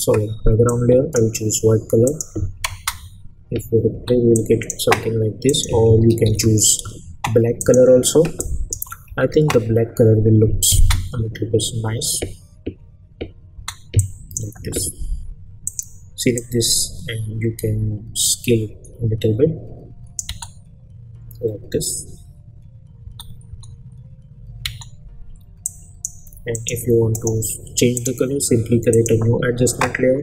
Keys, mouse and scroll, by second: 0.6-1.3 drag, 2.7 space, 4.3-4.9 click, 6.2 ctrl+y, 7.6 click, 8.7 Return, 10.7 space, 13.5 space, 14.0-14.6 drag, 20.3 space, 23.0 space, 25.6-26.2 click, 27.2 right click, 27.9 click.